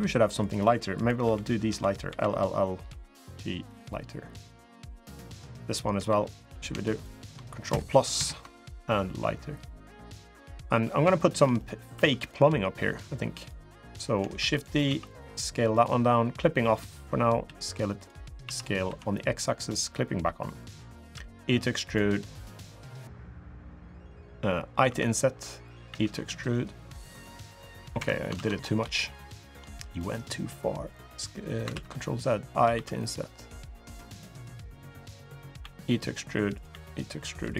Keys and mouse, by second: 0.2 click, 0.7 click, 1.0 l, 1.5 l, 1.8 l, 2.6 g, 4.1 click, 4.8 click, 6.2 click, 6.2 l, 6.7 shift+click, 7.9 ctrl+KP_Add, 9.0 g, 10.5 3, 10.9 shift+middle click, 11.3 middle click, 11.5 click, 11.7 3, 11.9 click, 13.6 click, 14.1 shift+d, 14.6 s, 16.6 click, 17.2 s, 18.2 s, 20.4 click, 20.9 e, 24.6 i, 25.6 e, 28.2 ctrl+z, 28.7 shift+middle click, 29.7 middle click, 31.5 ctrl+z, 32.5 i, 35.4 e, 36.5 e.